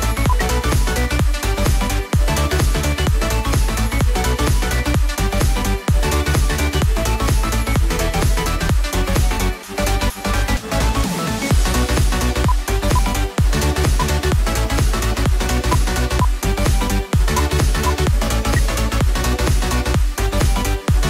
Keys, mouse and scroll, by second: 0.2 ctrl+q, 2.7 double click, 18.4 space.